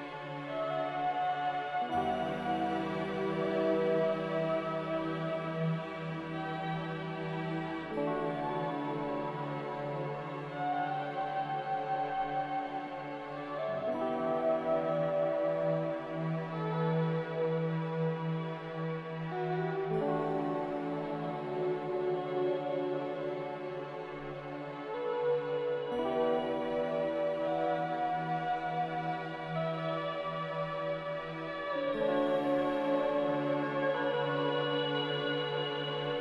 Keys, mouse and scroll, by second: 7.7 click, 8.5 click, 14.4 click, 18.9 q, 19.9 q, 34.1 ctrl+z, 34.4 ctrl+z, 34.5 ctrl+z.